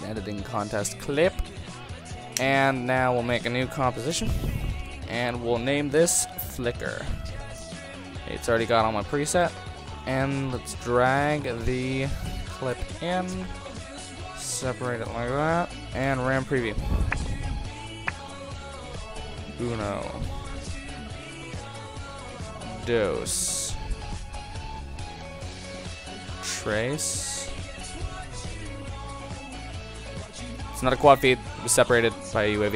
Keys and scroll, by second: 4.1 super+n, 6.6 super+n, 7.3 shift+f, 16.0 ctrl+0.